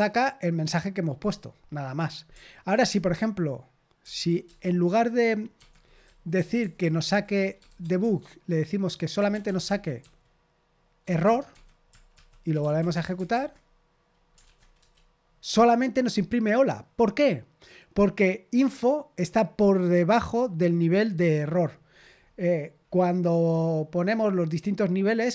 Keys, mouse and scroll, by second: 2.7 ctrl+p, 4.0 ctrl+p, 4.4 Return, 5.5 Escape, 6.0-10.0 typing, 11.2 Tab, 11.5 Escape, 11.8-13.2 typing, 14.4 ctrl+p, 14.7 Return, 22.1-23.4 scroll down 1, 23.4-24.0 scroll down 1, 24.0-25.3 scroll down 1.